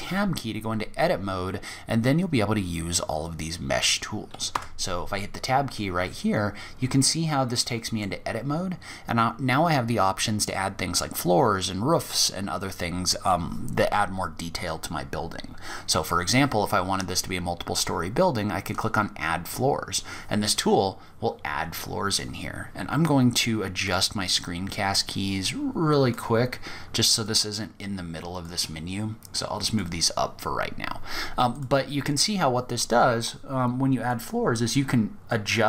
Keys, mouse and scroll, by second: 3.7 Tab, 6.0 scroll down 1, 6.3-6.7 scroll up 2, 6.8 middle click, 7.4-9.0 scroll down 2, 15.9-16.3 scroll down 2, 16.3-16.7 scroll up 3, 17.0-17.9 scroll down 1, 17.9 click, 17.9 scroll down 1, 23.0 click, 25.3 click, 27.6 click, 30.7 click, 33.3 click.